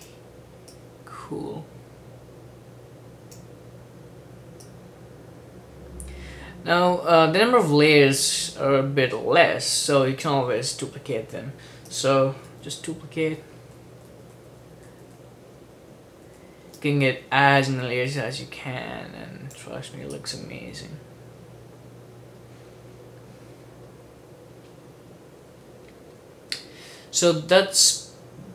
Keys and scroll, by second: 12.7 super+d, 13.5 super+d, 13.7 super+d, 14.0 super+d, 14.3 super+d, 14.5 super+d, 15.1 super+d, 15.2 super+d, 16.3 super+d.